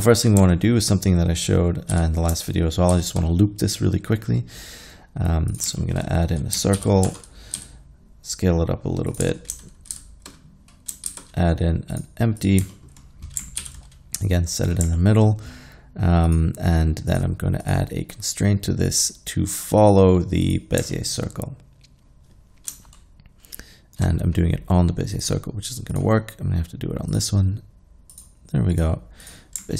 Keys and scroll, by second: 2.0 z, 2.9 shift+a, 6.8 alt+g, 7.1 Tab, 7.6 s, 9.3 Tab, 9.9 shift+s, 11.1 shift+a, 13.7 alt+g.